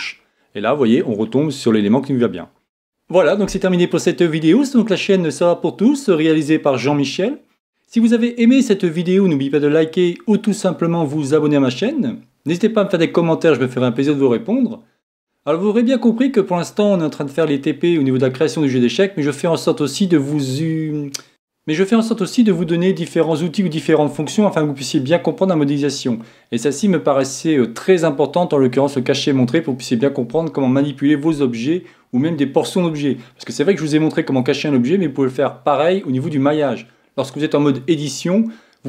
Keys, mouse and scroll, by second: 1.1-2.9 middle drag.